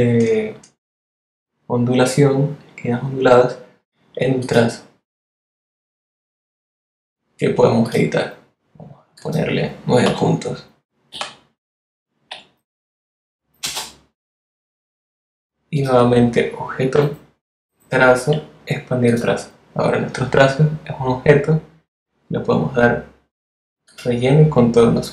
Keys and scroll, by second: 10.0 9, 11.1 p, 13.6 Return.